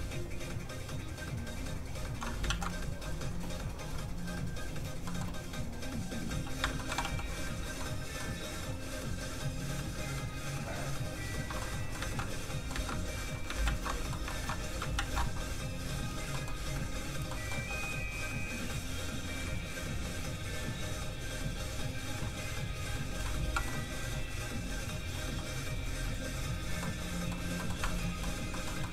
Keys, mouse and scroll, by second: 0.2 shift+click, 2.4 ctrl+shift+z, 3.0 shift+z, 4.5 click, 5.0 middle click, 6.2 f, 6.5 click, 6.7 shift+middle click, 7.0 middle click, 7.1 f, 7.2 click, 7.8 middle click, 9.9 click, 11.6 middle click, 11.9 ctrl+middle click, 12.0 ctrl+z, 12.1 ctrl+middle click, 12.2 middle click, 12.7 ctrl+z, 13.6 ctrl+shift+z, 14.1 shift+middle click, 14.2 shift+middle click, 14.9 ctrl+shift+z, 15.8 shift+click, 15.9 click, 16.3 middle click, 17.6 f, 17.8 click, 23.2 middle click, 23.9 f, 24.1 click, 25.2 f, 25.3 click, 26.8 middle click, 27.8 shift+middle click, 28.1 middle click, 28.5 middle click.